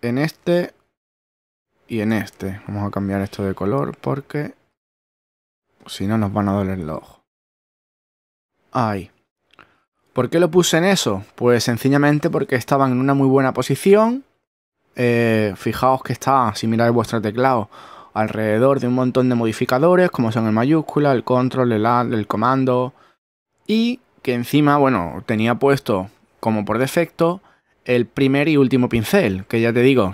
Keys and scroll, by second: 1.5 shift+<.